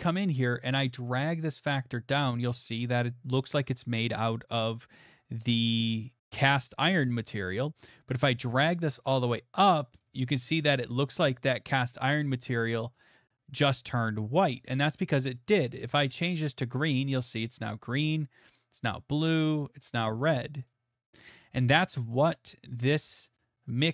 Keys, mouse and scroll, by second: 0.3 middle click, 10.0 click, 12.7 middle click, 15.1 click, 15.5 click, 20.6 click, 21.6 scroll, 22.1 middle click.